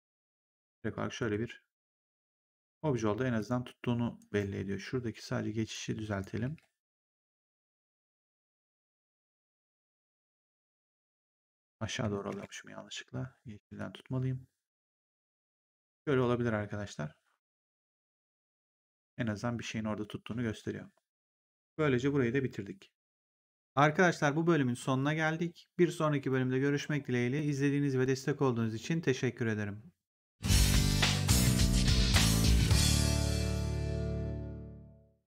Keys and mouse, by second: 0.2 click, 1.1 ctrl+1, 3.3 click, 4.1 right click, 5.6 click, 6.3 w, 7.1 click, 12.2 ctrl+z, 13.6 click, 15.9 right click, 18.4 click.